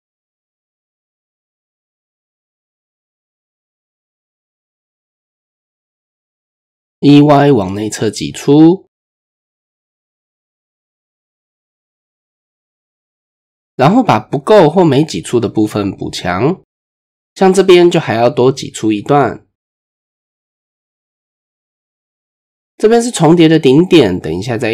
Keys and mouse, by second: 1.5-2.1 drag, 4.9 click, 5.6 KP_1, 6.3 KP_3, 7.0 shift+click, 8.2 e, 10.8 click, 11.2-14.0 middle drag, 16.3 middle click, 17.0 middle click, 17.7 middle click, 21.4 e, 24.2 middle click.